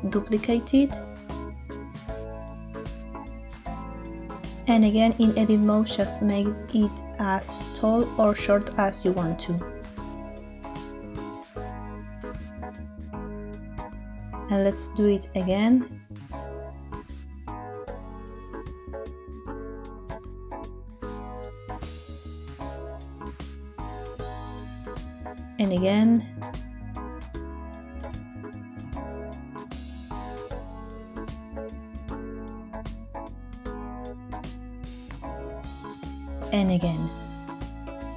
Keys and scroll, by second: 0.4 Escape, 6.2 Tab, 13.5 Tab, 14.6 shift+d, 15.2 shift+Escape, 19.2 Tab, 25.4 Tab, 26.4 shift+d, 27.0 shift+Escape, 30.5 Tab, 35.8 Tab, 36.8 shift+d, 37.4 shift+Escape.